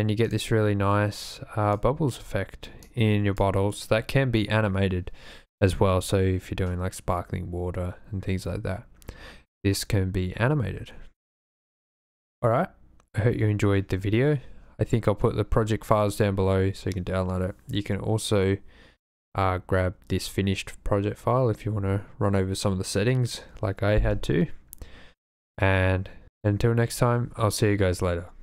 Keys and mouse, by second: 0.2 click, 1.2 click.